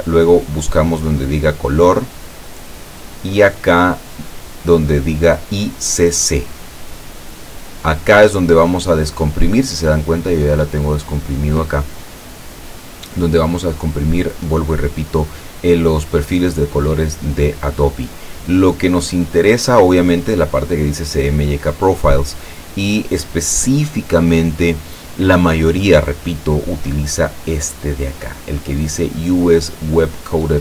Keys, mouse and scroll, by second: 0.6-1.1 scroll down 2, 1.9 click, 6.4 click, 10.0 click, 18.1 click, 20.6 click, 27.5 click.